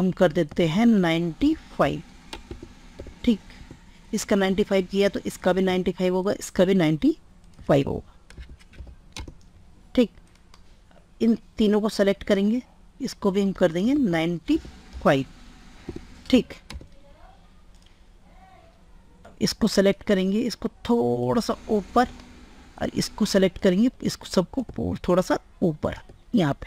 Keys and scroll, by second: 0.5 ctrl+a, 7.7 ctrl+a, 9.4 ctrl+a, 13.7 ctrl+a.